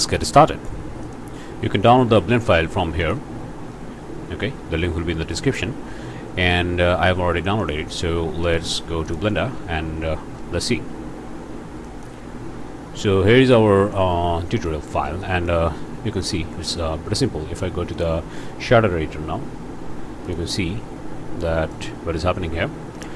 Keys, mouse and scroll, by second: 0.1 click, 0.1 alt+a, 0.1-0.5 alt+scroll up 3, 0.3 ctrl+click, 0.5 ctrl+click, 0.6 ctrl+space, 0.7 click, 1.1 click, 3.1 click, 7.6 click, 9.0 click, 11.9 click, 13.9 middle click, 14.7 click, 15.2 middle click, 15.5 click, 16.2 click, 17.9 click, 20.2 click, 20.9 scroll down 1, 21.6 middle click, 21.9-22.3 scroll up 2, 22.6-23.1 scroll up 4.